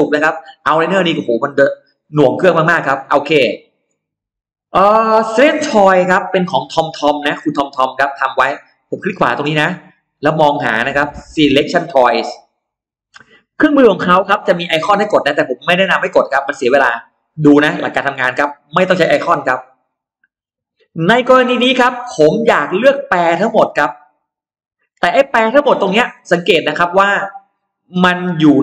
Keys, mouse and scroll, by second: 1.1 click, 1.9-2.2 scroll down 1, 3.4 click, 6.0 right click, 9.4 right click, 12.2 click, 13.4-19.0 drag, 19.7-21.2 scroll up 6, 21.5-21.8 scroll down 2, 22.2 scroll up 2, 22.4 middle click, 22.8 scroll down 2, 24.2 click, 27.3 click.